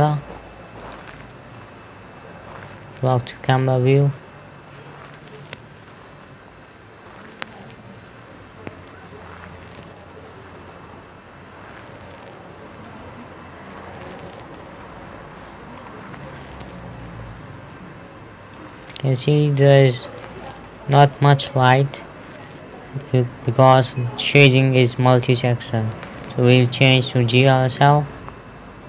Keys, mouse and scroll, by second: 1.3 click, 2.1 scroll down 1, 3.4 click, 5.6 middle click, 9.3 scroll down 1, 10.5 middle click, 13.7 middle click, 15.4-15.9 scroll down 1, 16.0 scroll up 1, 17.2 middle click, 20.5 click, 21.2 scroll down 1, 27.7 click.